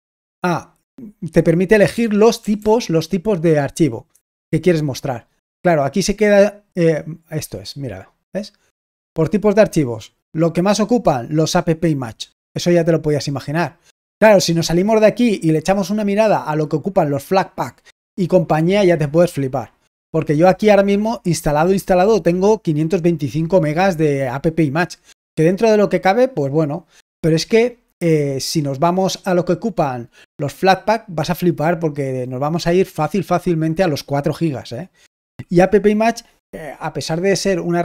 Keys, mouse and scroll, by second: 11.3 click, 11.6 click.